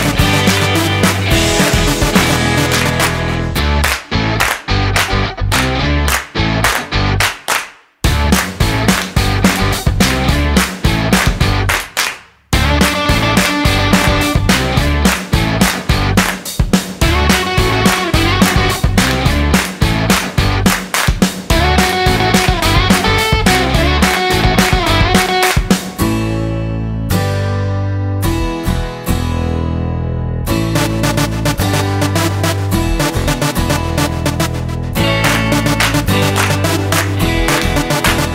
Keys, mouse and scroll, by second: 0.1 click, 0.7 click, 4.4-5.2 scroll up 11, 5.2 middle click, 6.1 middle click, 6.9 click, 7.5 click, 8.4 click, 10.2 Delete, 11.3 click, 12.4 click, 13.1 middle click, 16.0 shift+a, 18.9 m, 23.5 shift+a, 28.6 click, 33.0 middle click, 34.4 click, 37.9 middle click.